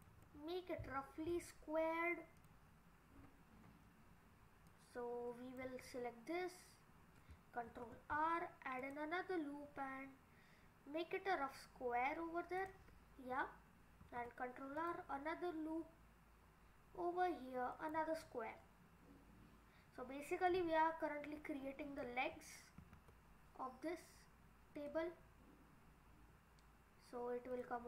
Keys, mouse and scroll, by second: 0.3 middle click, 2.4 click, 3.2-3.7 scroll down 7, 4.7 click, 5.9 scroll up 4, 7.7 ctrl+r, 14.0 ctrl+r, 18.2-19.2 scroll down 3, 20.5 click, 22.8 ctrl+r.